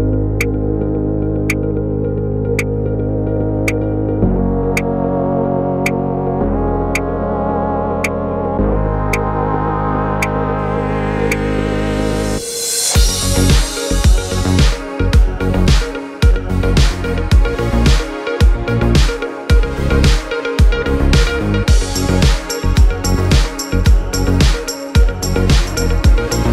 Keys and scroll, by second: 0.7 v.